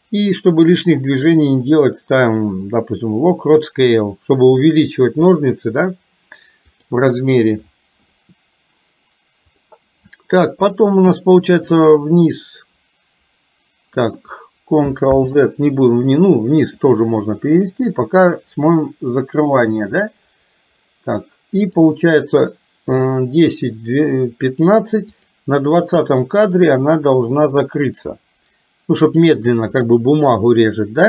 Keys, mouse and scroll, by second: 9.6 click, 10.8 click, 11.8-14.1 drag, 15.2 ctrl+z, 16.8 click, 18.1-21.8 drag, 25.2 click, 26.6-29.3 drag.